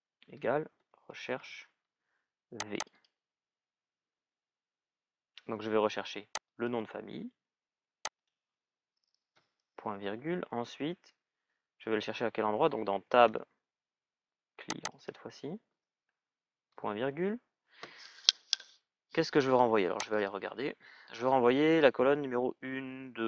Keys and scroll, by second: 0.3-1.6 typing.